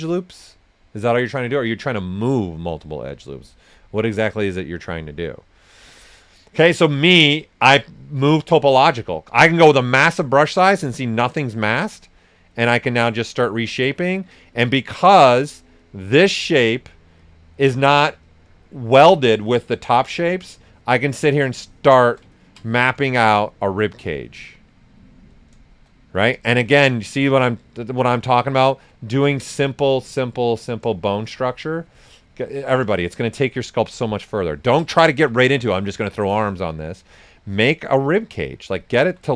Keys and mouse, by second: 8.2 click, 8.8 s, 8.9-10.3 drag, 10.0-11.5 typing, 10.3 ctrl+right click, 10.6 ctrl+alt+right click, 12.0 click, 14.0 right click, 14.7 click, 20.5-22.3 shift+drag, 20.6-21.3 typing, 22.8 right click, 23.5 click, 25.3 right click, 26.1 right click, 26.8 click, 28.2 shift+click, 29.0 s, 29.1 click, 30.9-34.5 shift+drag, 31.2 typing, 33.4-34.2 typing, 35.1 ctrl+right click, 36.3 click, 39.2 alt+right click.